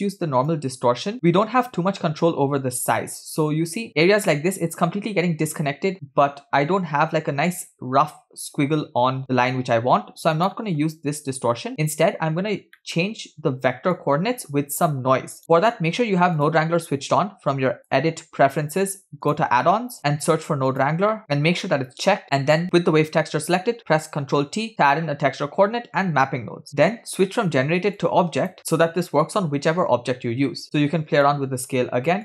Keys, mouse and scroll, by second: 0.5-4.3 drag, 10.4-11.7 drag, 12.6 scroll down 2, 12.9 middle click, 14.0-15.4 drag, 15.4 scroll down 1, 15.4-16.0 middle drag, 16.0-16.3 scroll up 1, 16.4 click, 17.8-19.7 drag, 22.5 click, 24.4 ctrl+t, 26.7 click, 28.0 click, 31.3 shift+click.